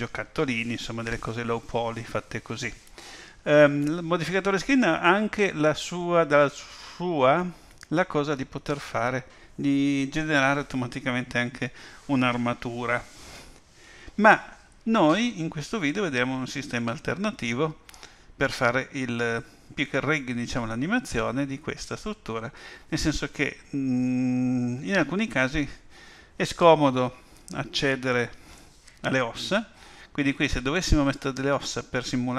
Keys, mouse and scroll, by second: 27.3 Tab.